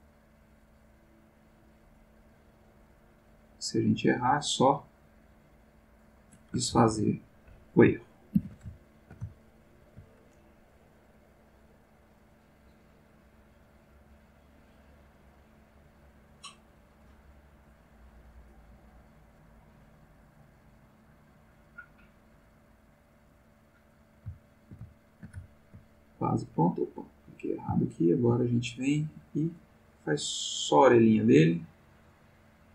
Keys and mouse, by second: 1.3-3.3 drag, 3.9-5.5 drag, 6.1 click, 6.7 ctrl+z, 8.3 ctrl+z, 8.7-10.1 ctrl+shift+middle drag, 11.3-13.6 drag, 14.0-17.1 drag, 17.7-19.2 drag, 19.6-24.0 drag, 24.4-25.9 ctrl+middle drag, 27.1 click, 27.8 ctrl+middle click, 29.6-32.7 drag.